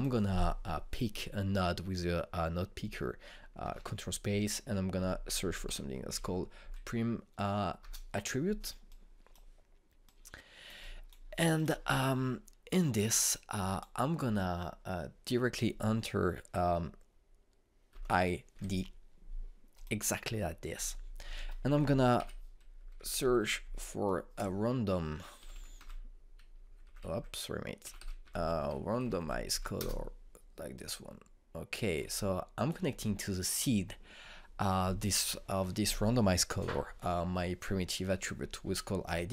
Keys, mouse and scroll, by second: 3.4 click, 4.3 ctrl+space, 5.4-6.8 typing, 7.2 Up, 8.4 Return, 9.5-17.0 drag, 18.6-19.7 typing, 20.4 click, 21.9 ctrl+space, 22.1-23.8 typing, 24.3 Up, 25.8-29.4 typing, 29.7 Down, 30.1 Up, 30.4 Return, 31.4-35.8 drag.